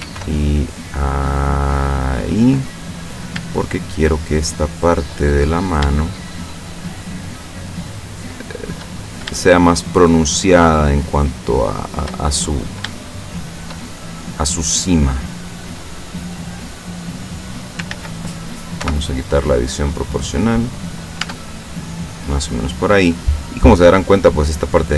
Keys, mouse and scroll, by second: 0.1 ctrl+r, 0.7 ctrl+click, 2.3 click, 3.1 right click, 3.7 shift+right click, 4.1 shift+right click, 5.2 shift+middle click, 6.3 shift+right click, 7.1 shift+right click, 7.6 shift+right click, 8.5 shift+right click, 9.0-9.5 shift+scroll up 1, 9.5 shift+middle click, 10.7 shift+right click, 11.3 shift+right click, 11.9 shift+right click, 12.3 shift+middle click, 13.1 shift+middle click, 13.9-15.2 shift+middle drag, 15.9-18.0 drag, 17.9 ctrl+z, 18.8 o, 19.7-21.1 drag, 21.3 Tab, 21.6-22.7 middle drag, 22.7-23.3 scroll down 1, 23.3-24.3 middle drag, 24.7 right click.